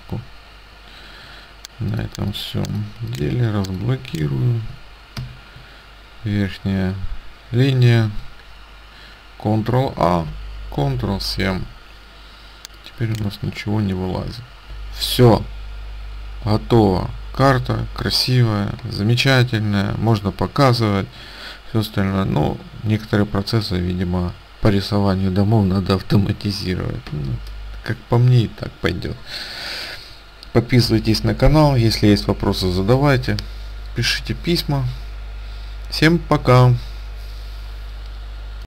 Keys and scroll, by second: 8.0 ctrl+a, 10.8 ctrl+7.